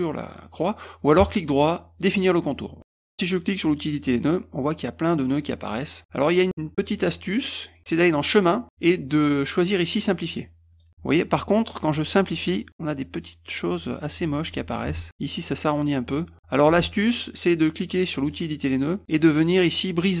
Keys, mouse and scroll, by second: 1.2 right click, 2.3 click, 3.6 click, 6.3 click, 8.2 click, 10.8 click, 14.2 ctrl+z, 15.0 ctrl+shift+z, 18.2 click, 19.1 middle click, 19.1-20.2 scroll up 5, 19.5 middle click, 19.8 middle click, 19.9 middle click.